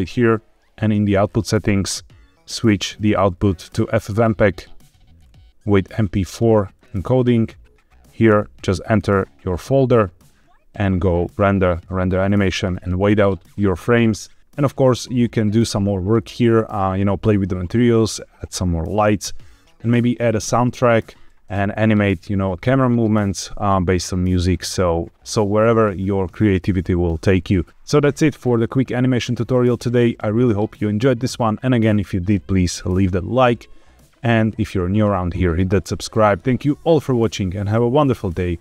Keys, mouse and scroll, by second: 0.8 click, 1.1-2.9 scroll down 3, 2.9-3.7 drag, 4.7 click, 5.1-5.9 scroll down 2, 5.9-6.8 drag, 8.2 click, 11.2-12.0 drag.